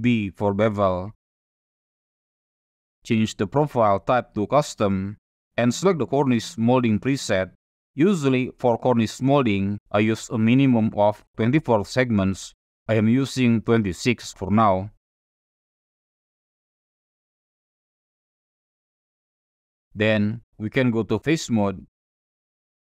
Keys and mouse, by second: 0.1 ctrl+b, 4.1 click, 5.3-6.7 drag, 10.3-14.1 drag, 15.4-16.4 middle drag, 16.6 shift+middle click, 17.2-18.8 drag, 20.1 click, 21.4 3, 21.8 click, 22.2 middle click, 22.7 shift+middle click.